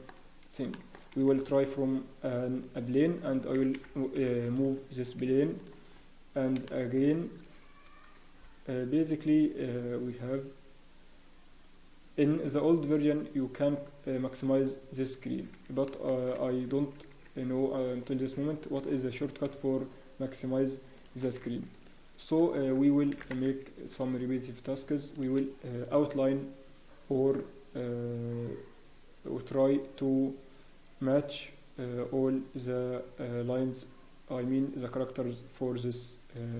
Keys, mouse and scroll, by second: 0.1 click, 0.1 scroll up 1, 0.7 shift+middle click, 1.3 scroll up 3, 1.3 shift+a, 3.2-3.5 scroll down 1, 3.5 r, 4.8-5.2 scroll down 2, 5.2 s, 5.9-6.6 scroll down 2, 6.6 shift+middle click, 7.0 scroll up 4, 13.0 click, 15.5 scroll down 1, 15.9 shift+middle click, 16.2 scroll down 2, 16.5 Tab, 17.1-18.8 scroll up 2, 17.1 s, 18.8 g, 22.3 alt+right click, 22.3 alt+click, 23.1 e, 25.5-28.5 scroll down 1.